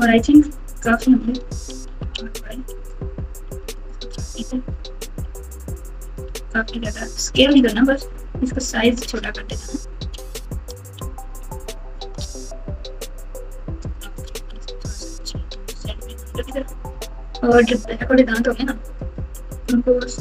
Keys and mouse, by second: 1.9 r, 4.1 g, 6.2 s, 10.2 s, 14.3 g, 17.1-17.6 ctrl+KP_6, 19.4 alt+z, 19.7 click, 19.9 click.